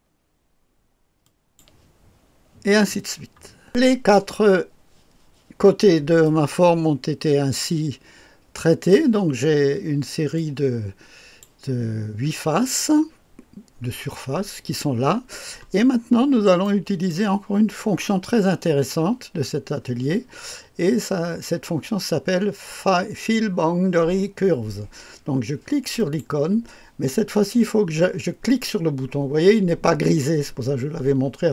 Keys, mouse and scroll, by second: 1.1 click, 3.6 click, 6.2-9.3 drag, 10.3-11.9 drag, 16.1-16.6 scroll up 1, 16.6 right click, 26.0 click.